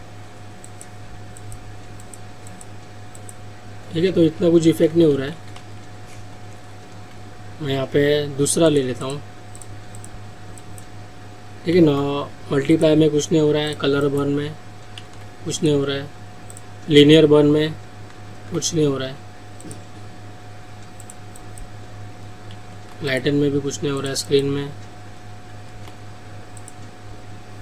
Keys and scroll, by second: 4.9 ctrl+alt+z, 11.9 ctrl+z.